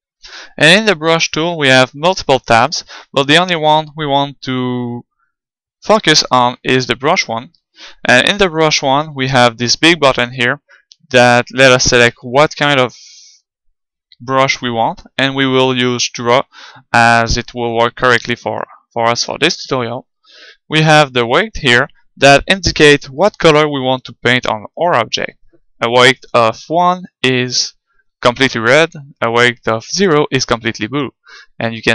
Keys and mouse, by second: 0.8-3.6 drag, 10.2-18.5 drag.